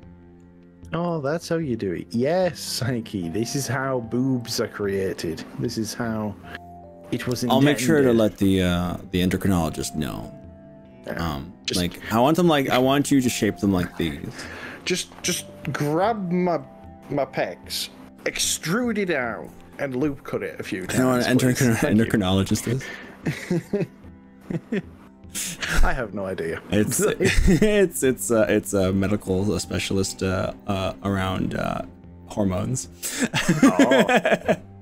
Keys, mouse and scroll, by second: 1.1 g, 4.6 click, 4.7-5.4 middle drag, 5.4 click, 5.6 right click, 15.6 scroll up 1, 16.2-16.9 scroll down 3, 16.9-18.5 middle drag, 18.6-23.8 middle drag, 23.8 right click, 26.6-34.8 middle drag.